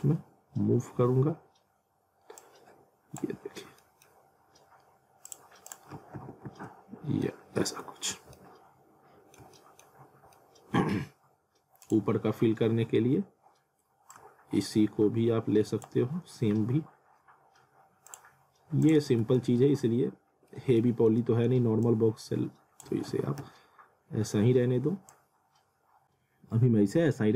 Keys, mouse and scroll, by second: 0.3 scroll down 1, 1.2-1.8 scroll up 1, 2.4 click, 3.4-3.8 scroll down 1, 3.8 middle click, 5.3 click, 6.2 w, 7.1 scroll down 1, 7.2 alt+middle click, 8.1 scroll down 1, 8.4 middle click, 10.0 scroll down 1, 10.3 middle click, 11.8 click, 14.1 click, 18.1 click, 19.1 z, 19.6 alt+middle click, 20.6 scroll down 1, 20.8 alt+middle click, 21.8 click, 22.9 alt+w, 23.4 z, 25.1 click.